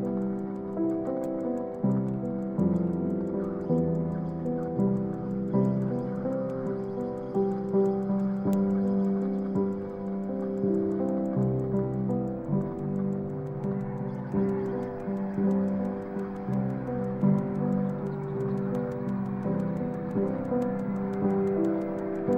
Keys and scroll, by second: 0.8 super+-, 14.6 Return, 19.1 z.